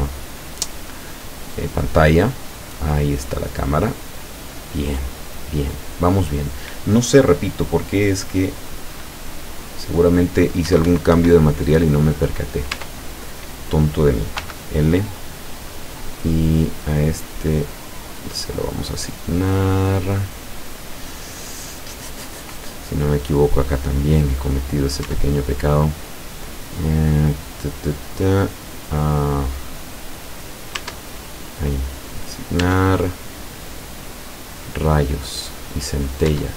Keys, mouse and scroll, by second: 10.7 Escape, 11.8 middle click, 12.8 Tab, 13.3 right click, 14.4 l, 18.1 click, 19.1-22.7 middle drag, 23.0 scroll down 1, 23.6-24.7 middle drag, 25.1 Tab, 25.5 right click, 27.0 scroll up 1, 27.2 scroll down 1, 28.2 click, 30.8 Tab, 32.1 click, 32.6 Tab, 33.2-34.4 middle drag, 34.6-35.0 scroll up 1, 35.4 right click, 36.3 Tab.